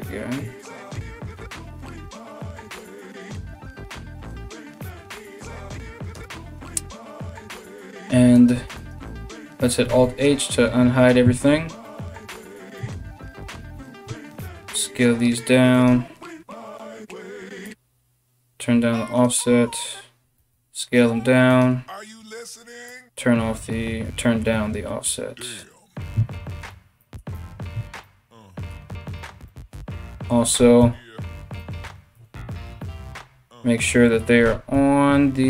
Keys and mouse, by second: 6.6 z, 7.9 right click, 8.2 Tab, 8.4 right click, 9.5 alt+h, 11.4 right click, 12.4 Tab, 13.6 a, 13.9 s, 15.5-17.3 middle drag, 17.3-21.2 shift+drag, 20.0 s, 21.2-30.1 middle drag, 22.6-31.3 shift+drag, 27.0 Tab, 28.8 Tab, 30.1 g, 31.3-35.4 middle drag, 31.7 KP_1, 32.4 KP_Decimal, 34.0 g.